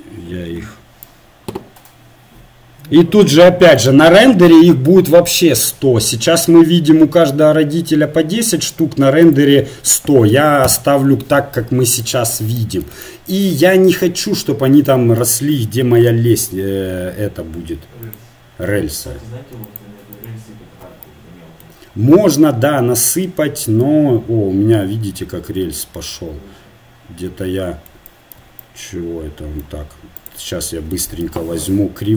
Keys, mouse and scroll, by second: 11.8-17.1 middle drag, 18.0-20.9 drag, 20.9-25.1 middle drag, 25.6 middle click, 28.7-30.2 middle drag, 30.2 right click, 30.7-32.1 drag, 31.3 Tab.